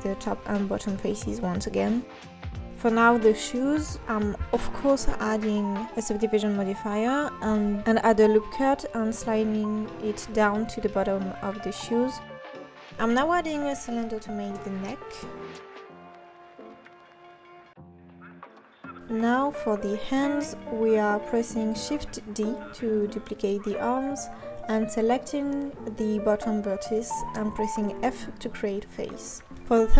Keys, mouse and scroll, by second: 0.2 click, 0.3 Tab, 0.6 x, 1.2 Tab, 1.3 click, 2.2-4.6 drag, 4.6 KP_3, 4.8 scroll up 3, 4.9 Tab, 5.5-6.5 drag, 6.5 KP_1, 6.6 Tab, 7.9-8.3 drag, 8.3 s, 8.8 click, 9.0 s, 10.6 click, 11.6 KP_3, 11.8-12.2 scroll down 3, 12.2-12.6 scroll up 1, 12.6-14.7 typing, 12.9 click, 13.9 scroll down 2, 14.8 click, 15.1 ctrl+s, 15.3 click, 15.4 scroll up 5, 15.8-16.8 typing, 16.5-17.0 scroll up 2, 17.0 click, 17.2 click, 17.7 ctrl+s, 17.8 scroll down 2, 18.0-19.6 drag, 19.9 click, 20.3-20.9 drag, 20.9 shift+d, 21.1 s, 21.9 g, 22.4 Tab, 22.6-23.8 drag, 24.3 f, 24.5 Tab, 24.8 Tab, 25.5-28.4 right drag, 28.4 click, 28.8 scroll up 3, 29.0 click, 29.2 g, 29.8 click.